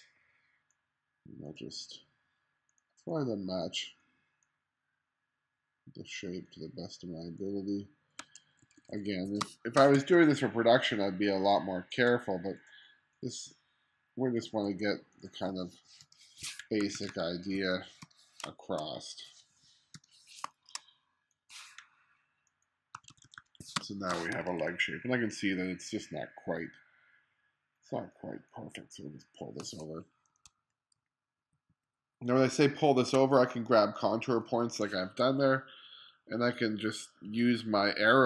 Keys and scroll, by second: 0.0 q, 8.7 2, 9.4 space, 10.0 2, 14.7 2, 16.1 BackSpace, 16.9 1, 18.1 BackSpace, 18.5 space, 20.0 BackSpace, 20.5 space, 23.0 1, 23.8 space, 24.4 2, 30.6 shift+Left.